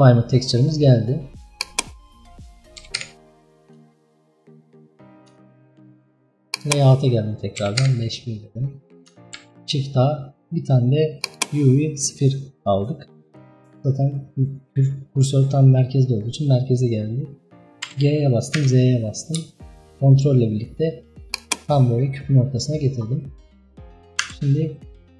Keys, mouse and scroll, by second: 0.5-1.6 scroll down 2, 1.6 click, 2.3 scroll up 1, 2.7 KP_5, 3.0 KP_1, 3.6-4.0 scroll down 2, 4.0-4.5 shift+middle drag, 4.5 scroll up 3, 5.5-6.6 shift+middle drag, 6.6-7.2 drag, 7.2 KP_5, 7.7 KP_1, 8.5 scroll up 1, 11.4 shift+a, 13.9 scroll up 2, 14.5-17.9 middle drag, 17.9 g, 21.8-22.7 scroll up 5, 22.7-23.5 scroll down 8, 24.3 s.